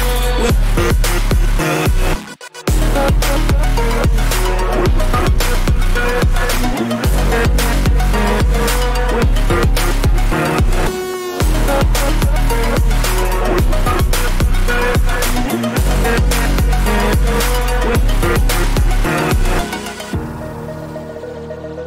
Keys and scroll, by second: 6.3 ctrl+alt+z, 11.1 ], 21.3 ctrl+-.